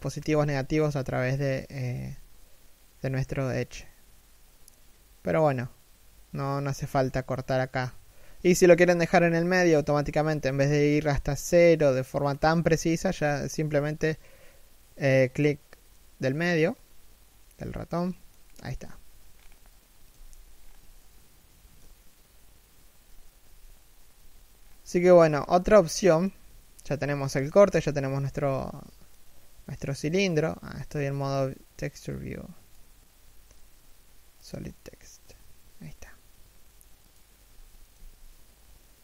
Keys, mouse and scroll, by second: 18.0-18.6 scroll up 1, 18.9-20.2 scroll up 1, 20.2-20.6 scroll down 1, 20.6 shift+middle click, 23.0 a, 24.2-24.6 scroll down 1, 24.6 shift+middle click, 24.9-25.4 scroll up 1, 25.4 shift+middle click, 27.5 middle click, 27.8 z, 28.0 middle click, 29.6 middle click, 37.1 1, 37.5 z, 38.8 a.